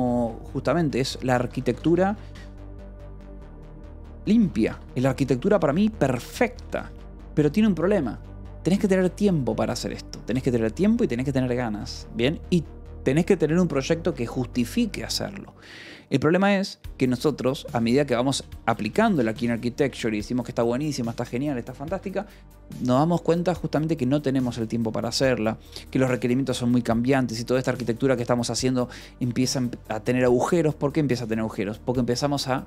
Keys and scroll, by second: 0.9-7.4 typing, 18.2 b, 21.8 Escape.